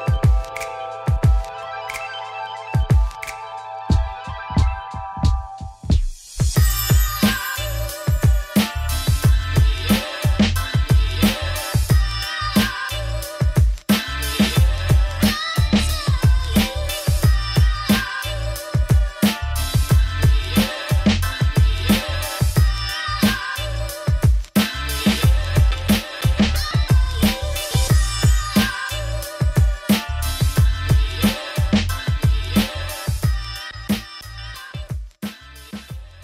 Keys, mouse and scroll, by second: 0.8-2.0 drag, 2.4-3.3 scroll down 2, 3.3 click, 3.4 shift+middle click, 3.8 scroll up 1, 3.9 right click, 4.5 click, 6.1-7.1 right drag, 7.1 click, 7.5 scroll down 2, 7.6 ctrl+s, 8.2 click, 9.9 click, 10.0 right click, 11.2 middle click, 11.8-12.1 scroll up 4, 12.1 shift+middle click, 12.4-15.0 drag, 15.1-16.4 shift+drag, 16.5 click, 17.1-22.2 shift+drag, 22.4-24.5 drag, 24.5-25.6 scroll down 14, 25.6 click, 26.6 middle click, 27.4 Tab, 27.8 1, 27.9 click, 28.0 g, 29.9 middle click, 30.3 2, 30.4-32.1 drag, 32.1-33.1 middle drag, 33.1 click, 34.7 click, 35.6-36.2 middle drag.